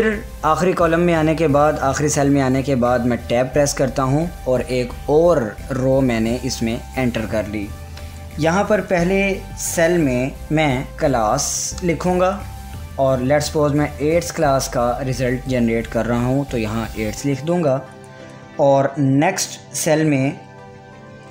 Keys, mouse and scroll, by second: 0.6 click, 3.2 Tab, 10.3 Tab, 10.6-11.5 typing, 12.2 Tab, 13.6-15.0 typing, 17.9 Tab, 21.2-21.3 typing.